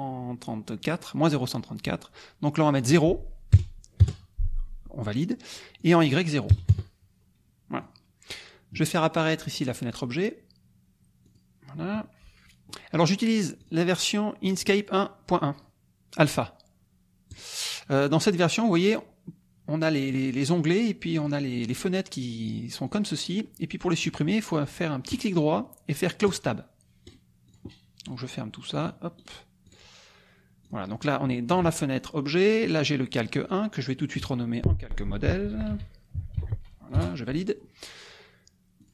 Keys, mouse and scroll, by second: 2.7 click, 3.9 KP_0, 4.0 KP_Enter, 5.5 click, 6.7 KP_Enter, 7.9 click, 9.4 click, 11.2 click, 13.6 click, 14.5 click, 17.3 click, 21.2 click, 21.7 click, 22.4 click, 23.2 click, 25.1 right click, 26.3 click, 27.0 right click, 27.5 click, 28.0 right click, 28.8 click, 29.1 right click, 29.7 click, 30.6-32.2 drag, 33.3 click, 35.4-36.8 typing, 37.2 Return, 38.8 click.